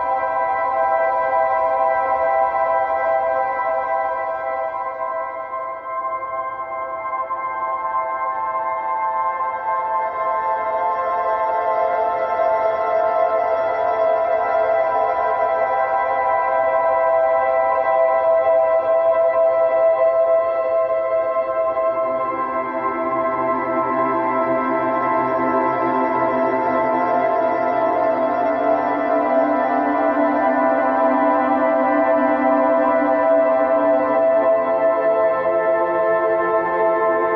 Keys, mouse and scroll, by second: 0.8 click, 1.9 click, 3.1-4.0 shift+right drag, 4.0-4.4 middle drag, 4.4 scroll down 1, 4.6 middle click, 4.9 shift+a, 7.5-9.9 right drag, 9.9 click, 11.2 g, 14.1 s, 16.3 g, 17.4 s, 18.3 g, 19.9-22.4 drag, 22.4-23.5 shift+middle drag, 23.5-24.5 drag, 25.9-27.3 drag, 29.1 click, 30.0 g, 33.8-35.2 drag, 35.8-36.9 drag, 37.1-37.3 middle drag.